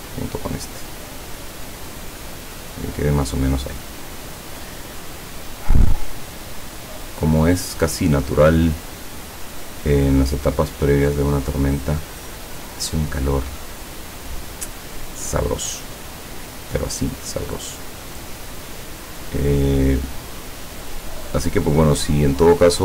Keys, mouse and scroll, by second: 0.3-2.8 drag, 5.0-5.4 scroll down 2, 12.3 click, 16.9 click.